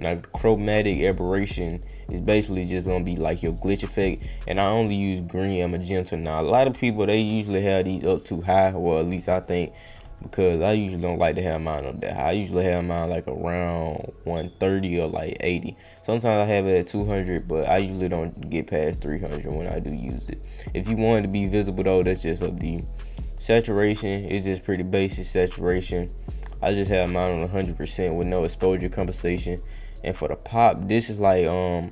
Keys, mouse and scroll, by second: 2.8-4.0 drag, 5.7-8.0 drag, 10.8-19.8 drag, 22.6 click, 23.3 click, 29.2 click, 29.9 click, 31.8-31.9 drag.